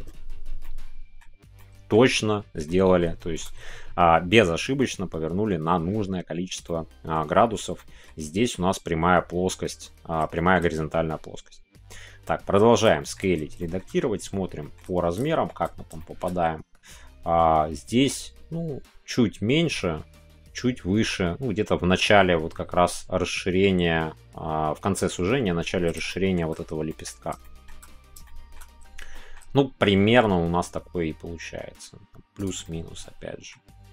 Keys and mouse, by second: 0.6 middle click, 1.5 middle click, 2.6 middle click, 3.1-5.4 shift+middle drag, 6.6 middle click, 7.7-8.0 middle drag, 9.8 middle click, 10.4 shift+middle click, 12.7 click, 12.7 s, 13.0 middle click, 14.6 shift+middle click, 15.2 shift+middle click, 15.9 shift+middle click, 26.1 shift+middle click, 26.8 middle click, 27.4 shift+middle click, 28.2 shift+middle click, 29.1 shift+middle click, 29.5 middle click, 32.4 click, 32.6 middle click.